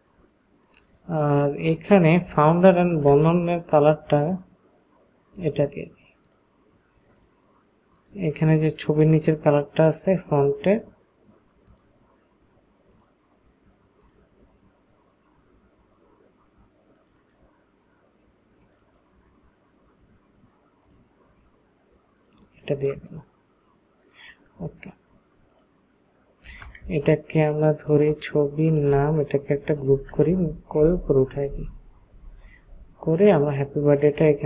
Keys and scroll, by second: 29.7 ctrl+shift+g, 30.8 Up, 31.3 Up, 31.5 Up, 31.7 Up, 32.1 Up.